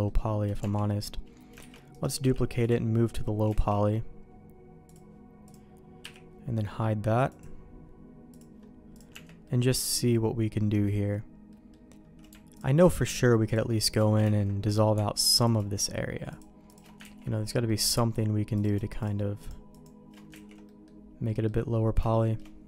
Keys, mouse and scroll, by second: 0.6 Tab, 1.6 shift+d, 2.2 m, 3.5 alt+a, 4.9 click, 5.5 click, 6.0 h, 7.3-8.6 drag, 8.9 click, 9.1 Tab, 9.4 middle click, 10.7 middle click, 11.5 middle click, 14.2 ctrl+x, 15.4 click, 16.3 click, 17.0 ctrl+x, 17.7 middle click, 20.5 ctrl+x, 20.7 middle click, 21.3 middle click, 22.0 shift+middle click.